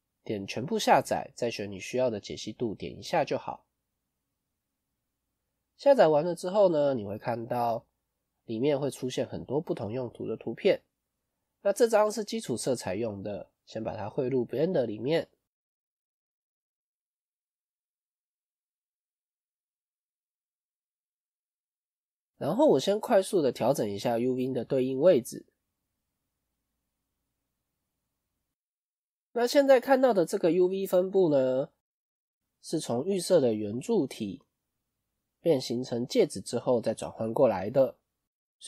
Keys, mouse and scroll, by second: 27.0 click, 32.7 middle click.